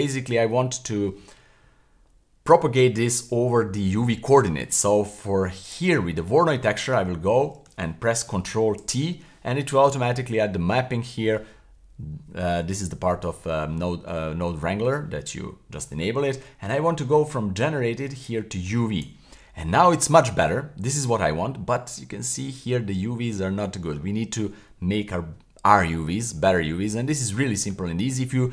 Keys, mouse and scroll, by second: 0.7-2.6 scroll down 1, 5.6 click, 8.9 ctrl+t, 18.2-19.1 drag, 20.4-21.3 scroll up 1, 21.3 middle click, 22.2 scroll up 1, 22.3 middle click, 23.3 scroll down 1, 23.7 middle click.